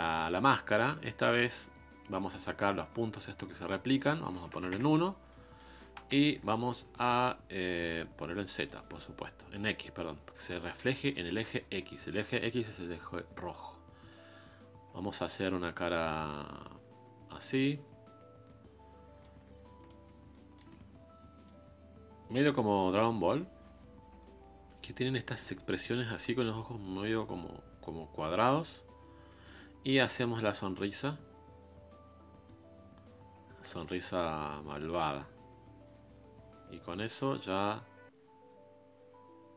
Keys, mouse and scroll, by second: 0.6-1.3 scroll up 1, 1.3-5.9 middle drag, 5.9 KP_1, 6.7 f, 8.6 click, 9.3 scroll up 1, 14.1-17.1 drag, 19.8-33.2 ctrl+drag.